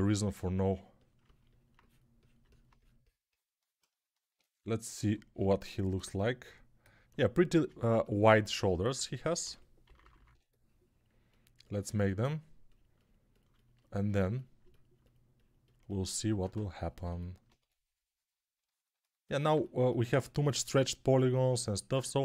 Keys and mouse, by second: 9.3-10.2 typing, 17.4 2, 20.4-22.2 drag, 20.4-22.2 middle drag, 20.4-22.2 right drag, 20.5 g.